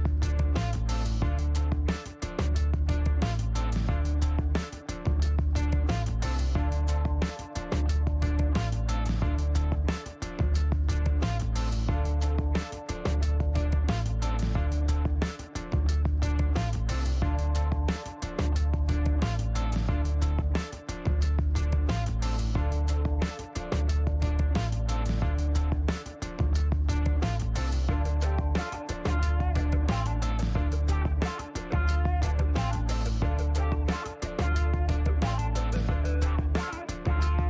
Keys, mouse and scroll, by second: 0.4 click, 2.0 click, 2.5 right click, 3.9 right click, 4.4 click, 5.0 middle click, 6.5 click, 7.8 KP_5, 7.9 KP_0, 8.1 KP_Enter, 9.6-10.7 drag, 12.0 click, 13.1 click, 14.9 click, 16.8 click, 18.1 click, 19.2 click, 21.2 click, 23.0 Delete, 25.3 click, 26.4 click, 27.7 click, 28.8 middle click, 29.3 scroll down 2, 29.4 middle click, 32.7 click, 34.3 click, 36.1 KP_3, 36.3 ,, 36.5 KP_5, 37.0 KP_Enter.